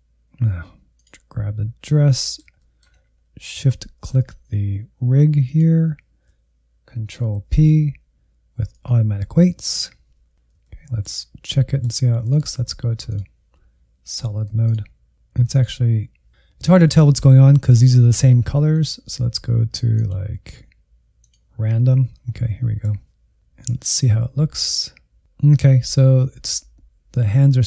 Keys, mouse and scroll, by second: 2.1 middle click, 3.0-3.5 shift+scroll up 3, 3.8 shift+middle click, 5.4 shift+click, 7.2 ctrl+p, 11.3-12.1 scroll down 6, 12.1 shift+middle click, 13.0-14.1 drag, 14.1 alt+z, 14.4-15.6 drag, 15.6 middle click, 18.6-21.5 drag, 21.7 scroll up 1, 21.8 middle click, 22.3 shift+z, 23.0-27.6 drag.